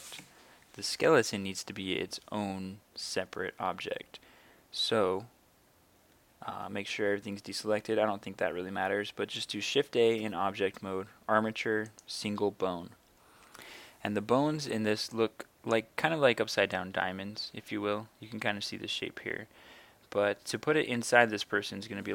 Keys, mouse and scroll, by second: 6.5 a, 9.9 shift+a, 11.9-16.3 drag, 16.8-22.1 right drag.